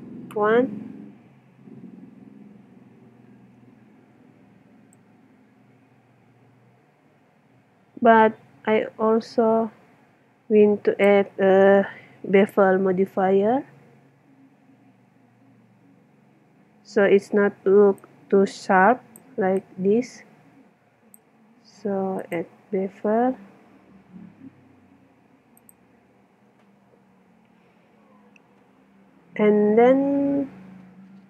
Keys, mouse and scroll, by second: 4.9-6.8 drag, 13.3-17.6 middle drag, 18.0-21.6 drag, 21.6 middle click, 22.2-24.1 drag, 24.1-25.7 middle drag.